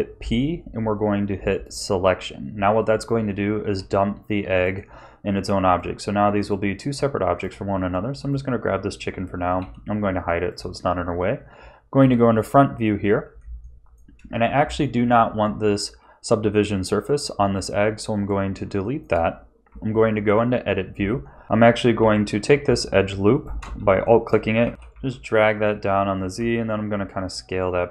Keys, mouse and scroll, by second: 2.9 Tab, 4.5 click, 5.7 click, 6.4 click, 7.3 click, 8.2 click, 9.6 h, 10.4 click, 11.9 KP_1, 13.0 scroll down 1, 13.6 shift+middle click, 18.1 click, 18.8 shift+middle click, 19.6 Tab, 21.4 KP_1, 21.9 2, 23.3 alt+shift+click, 24.0 shift+middle click, 24.6 g, 26.3 s.